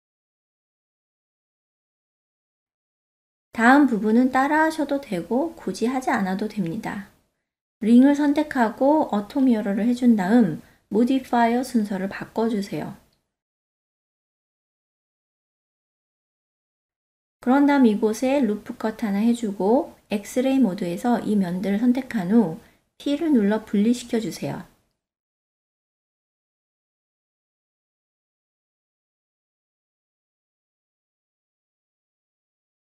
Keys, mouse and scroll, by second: 1.4-2.0 shift+middle drag, 3.0 click, 4.3 n, 6.6 click, 7.5 click, 9.2 n, 9.8-10.6 ctrl+middle drag, 11.9-12.6 drag, 13.3 click, 14.1 Tab, 16.0 click, 17.5 ctrl+r, 19.6 ctrl+middle click, 21.7 3, 22.3 alt+z, 22.7 click, 24.3 p, 27.0 Tab, 27.4 click, 28.0 Tab, 30.0 ctrl+middle click, 30.9-32.9 middle drag.